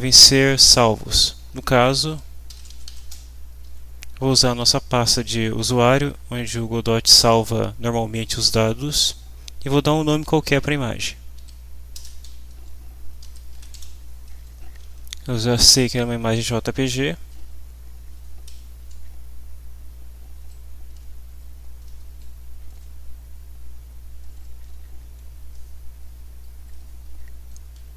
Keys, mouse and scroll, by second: 1.8-3.6 typing, 5.8 /, 7.2 Left, 8.2 Right, 11.4-14.2 typing, 15.6 g, 16.1 Right, 16.4 Left, 17.4 End, 18.5 Down, 20.3 Up, 21.3 Down, 21.8 Up, 26.0 Down.